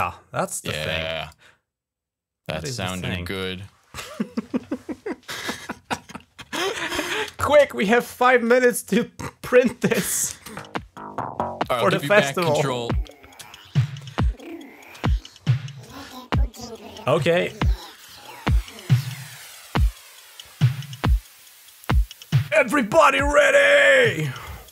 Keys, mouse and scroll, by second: 1.0 click, 3.2 click, 6.5 shift+scroll up 2, 7.5 shift+scroll up 2, 8.1 shift+scroll up 2, 9.4 click, 10.2 space, 13.4-14.7 shift+scroll down 3.